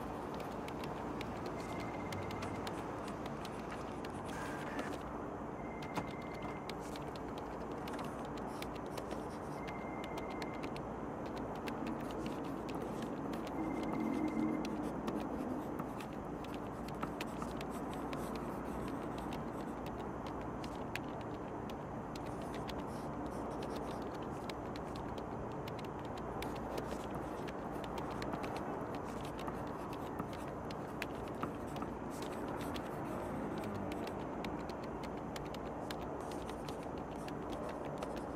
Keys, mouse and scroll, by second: 1.3-1.9 drag, 2.5-3.7 drag, 4.6-5.9 drag, 7.3-7.6 drag, 11.9 click, 12.5 click, 13.6 click, 14.3 click, 15.8 click, 16.7 click, 22.6 space, 25.4 space, 29.2-29.7 drag, 31.9 click, 32.6-34.5 drag, 35.3 click.